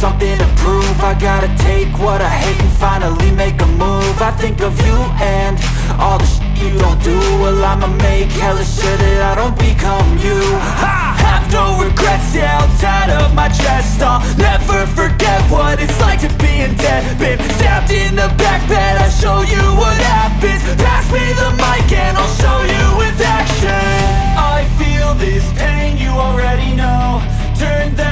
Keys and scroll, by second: 8.0 Down, 8.3 Return, 8.4 Return, 8.8 i, 9.5 Return, 10.4-11.6 typing, 12.7 shift+,, 13.2 Left, 13.6 space, 13.6 Right, 14.7 Left, 15.0 Down, 15.4 Up, 16.3-20.3 typing, 16.4 KP_Add, 20.8 Right, 22.0 =, 22.6 space, 22.9 KP_0, 24.7 ctrl+s.